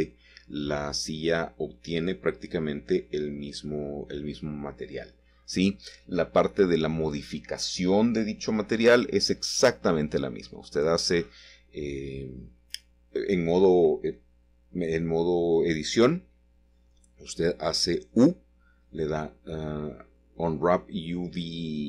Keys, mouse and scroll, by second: 0.3-1.2 scroll down 1, 0.9-2.6 middle drag, 2.3-3.3 scroll up 1, 2.7 shift+middle click, 3.3-3.6 shift+scroll up 1, 3.8-4.5 scroll down 1, 5.2 click, 9.0 ctrl+shift+s, 10.0 KP_Add, 10.8 Return, 12.7-13.4 scroll down 1, 13.7-15.2 shift+middle drag, 16.1-16.5 scroll up 2, 17.1 shift+middle click, 17.6 click, 18.4 shift+click, 19.2 shift+click, 20.8 shift+click.